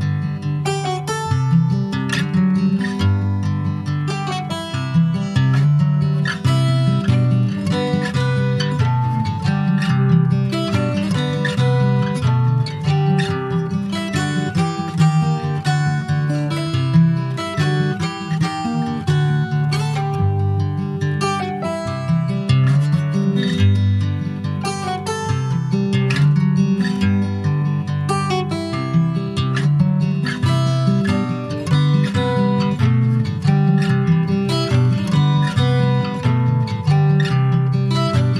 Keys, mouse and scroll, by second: 1.6 ctrl+s, 1.7 middle click, 2.4 ctrl+s, 2.5 click, 2.9 middle click, 3.6 ctrl+s, 6.6 click, 7.2 /, 7.7 middle click, 8.3 Tab, 8.6 middle click, 9.5 Tab, 9.9-11.4 middle drag, 11.4 click, 12.8 p, 13.2 click, 13.7 Tab, 14.1 click, 15.3 p, 16.1 click, 16.5 ctrl+s, 16.7 click, 17.3 l, 18.9 Tab, 19.7 click, 20.7 l, 21.4 /, 22.0 /, 22.6 middle click, 23.1 click, 23.5 ctrl+s, 23.5 click, 23.8 Tab, 24.2 middle click, 24.6 click, 24.9 Tab, 25.2 click, 25.9-27.2 right drag, 27.2 click, 27.6 ctrl+s, 27.7 click, 28.5 shift+d, 29.5-30.1 scroll up 1, 30.1 click, 31.5 middle click, 31.9 s, 33.5 s, 36.4-37.0 scroll up 2, 37.1 click.